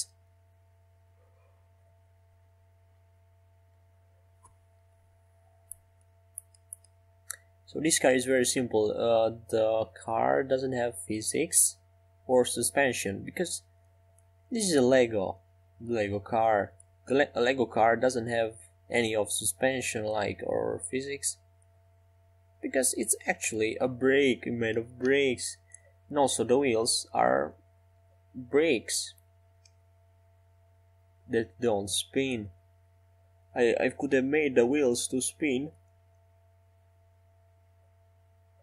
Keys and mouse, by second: 2.7-6.7 right drag, 4.9 r, 8.6-13.4 middle drag, 12.1-15.4 right drag, 13.4-15.4 drag, 17.2 g, 21.3-22.7 right drag, 22.3 middle click, 23.6 g, 25.9 x, 29.0 s, 35.0-36.9 middle drag, 38.5 shift+d.